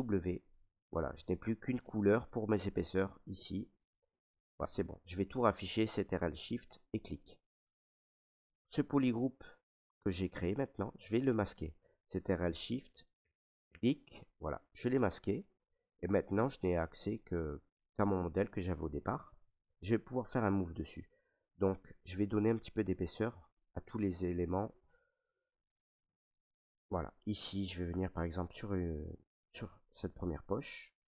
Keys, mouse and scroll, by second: 0.1 ctrl+w, 1.5 ctrl+right click, 2.5 right click, 3.3 ctrl+right click, 4.1 alt+right click, 4.9 ctrl+right click, 6.7 click, 8.1 ctrl+right click, 9.1 click, 10.1 right click, 10.7 ctrl+right click, 12.8 click, 13.4 click, 14.5 ctrl+right click, 15.1 ctrl+right click, 15.4 right click, 16.1 right click, 16.8 alt+right click, 17.4 right click, 18.0 ctrl+right click, 20.6 s, 23.0 right click, 23.9 click, 24.0 right click, 24.8 right click, 25.8 right click, 26.0 click, 26.8 alt+right click, 28.1 ctrl+right click, 28.7 alt+right click, 29.5 right click.